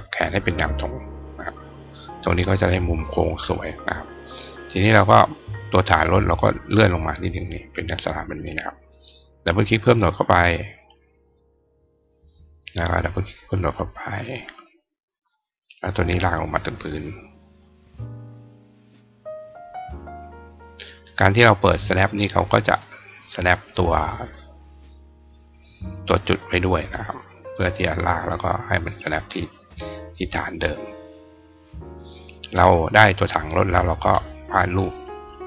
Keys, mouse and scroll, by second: 2.0 click, 5.7-7.8 drag, 9.0 click, 9.5 click, 10.4 click, 10.7 click, 11.2 click, 12.7 click, 13.0 click, 13.4 click, 15.8-18.0 drag, 19.1-20.9 drag, 22.6 click, 24.4-32.5 drag, 32.9 click, 34.9 click.